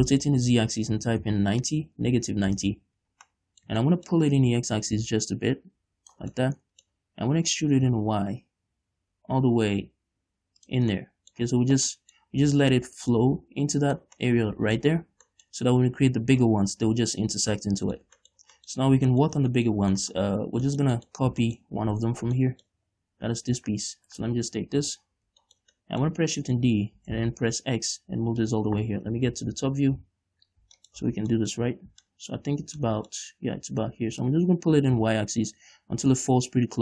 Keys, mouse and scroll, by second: 3.0 Return, 3.7-5.3 middle drag, 5.3-6.8 drag, 6.8-8.0 middle drag, 8.0 e, 11.2 click, 11.4-13.4 middle drag, 13.4-14.7 drag, 14.7 middle click, 18.0 middle click, 18.9 middle click, 19.3 scroll down 2, 19.7 shift+middle click, 20.6 scroll down 2, 20.8 Tab, 21.1 shift+middle click, 21.6-22.3 scroll up 4, 21.9 shift+middle click, 22.3 Tab, 22.7 shift+scroll down 1, 22.8 shift+middle click, 23.3-24.5 scroll down 1, 24.5 right click, 25.2 l, 25.5 scroll down 1, 25.9 shift+middle click, 27.4 shift+d, 28.9 click, 29.7 KP_7, 30.3 KP_5, 31.4 middle click, 31.4 z, 32.1-32.5 scroll up 1, 32.5 shift+middle click, 32.9 scroll down 1, 33.3 shift+middle click, 33.7 scroll up 1, 34.7-36.8 drag.